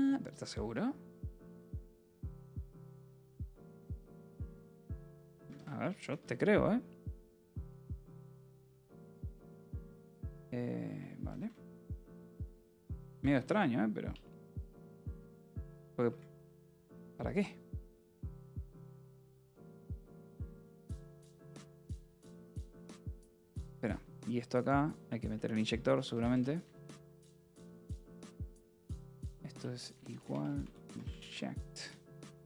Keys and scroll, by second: 0.2 a, 0.7 Tab, 2.2-8.3 typing, 8.7 Return, 12.2-16.5 typing, 16.9 Return, 17.7-22.5 typing, 20.4 Return, 23.8 Escape, 23.9 k, 25.0-27.4 typing, 28.5 shift+i, 28.6 BackSpace, 29.7-31.5 typing.